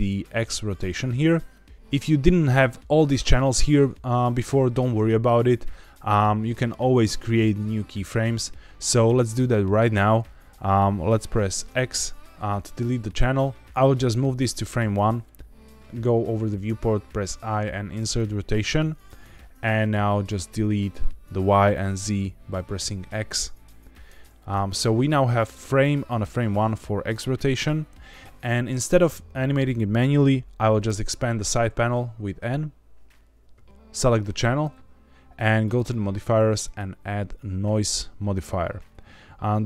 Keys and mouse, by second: 9.3 click, 11.6 x, 13.9-14.9 drag, 19.7 click, 22.7 x, 24.3 click, 25.5 click, 26.2-26.6 drag, 30.8 n, 36.5-37.8 drag.